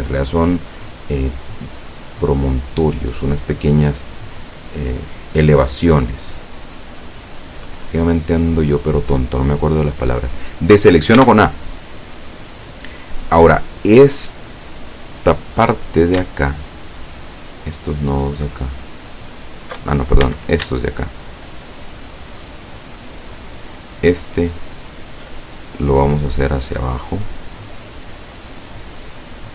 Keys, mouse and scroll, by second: 6.9 click, 11.2 a, 16.8 alt+shift+right click, 18.6 alt+shift+right click, 20.3 shift+a, 23.3 alt+shift+right click, 23.8 alt+shift+right click, 26.4-29.5 drag.